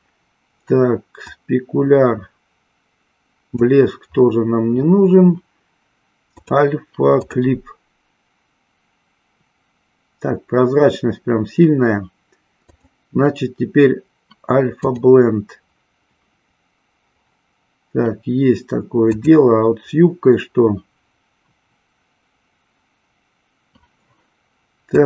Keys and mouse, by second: 1.1-3.8 drag, 6.4-7.5 drag, 12.6-14.9 drag.